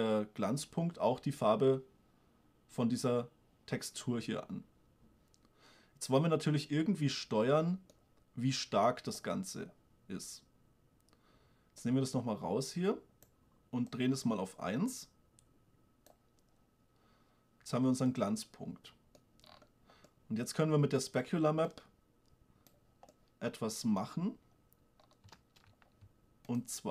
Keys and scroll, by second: 25.7 shift+space.